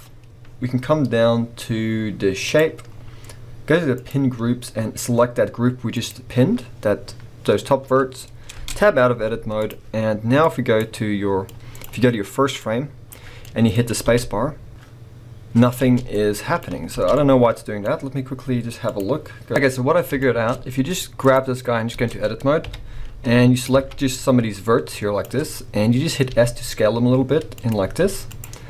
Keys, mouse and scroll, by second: 0.4-2.5 scroll down 2, 2.8-3.9 scroll down 2, 8.6 Tab, 8.9 scroll down 1, 9.1 z, 11.4-13.4 drag, 13.4-18.8 middle drag, 13.7 scroll up 2, 14.0 space, 15.7 space, 17.0 space, 18.8 click, 19.5 middle drag, 19.6 scroll up 2, 20.5 middle click, 20.5 scroll down 2, 21.2 click, 21.9 b, 22.6 KP_1, 24.0 click, 25.4-26.3 scroll up 2.